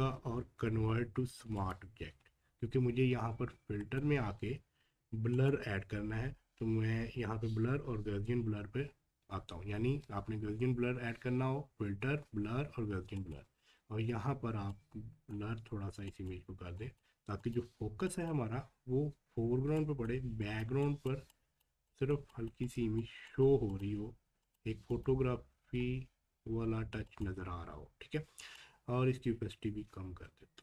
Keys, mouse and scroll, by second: 1.5 click, 3.8 click, 13.1 click, 13.2-30.6 drag.